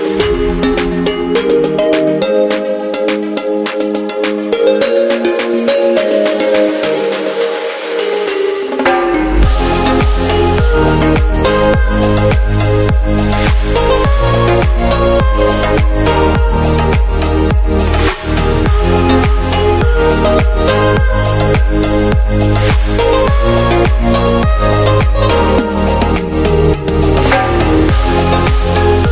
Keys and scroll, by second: 0.1 typing, 4.7 super+z.